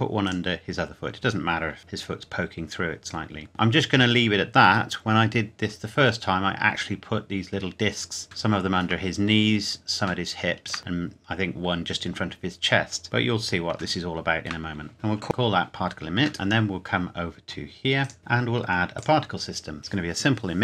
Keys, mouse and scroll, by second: 0.2 click, 1.8 middle click, 3.5 scroll down 1, 3.6 middle click, 5.8-6.8 scroll down 1, 8.4 shift+middle click, 10.2 shift+middle click, 13.0 Tab, 13.9 shift+middle click, 14.9 click, 16.3-17.1 scroll up 1, 18.0 click, 18.2 ctrl+s, 18.9 click.